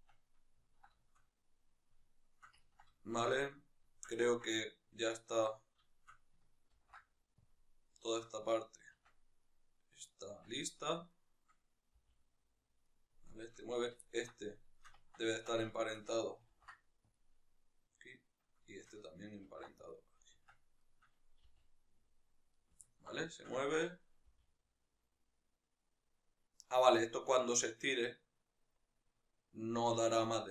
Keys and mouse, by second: 0.4-5.6 ctrl+middle drag, 5.6 shift+right click, 7.3 ctrl+p, 7.7-9.1 shift+middle drag, 9.1-10.1 right drag, 10.1 Tab, 10.5 right click, 10.8 right click, 11.8 g, 12.7 right click, 13.4 right click, 13.8-15.5 ctrl+middle drag, 15.2 Tab, 15.5 shift+right click, 16.9 ctrl+p, 17.8-18.5 right drag, 19.7 ctrl+p, 20.3 Tab, 20.6 right click, 21.3 g, 22.4 right click, 22.6-30.5 ctrl+middle drag, 24.1 g.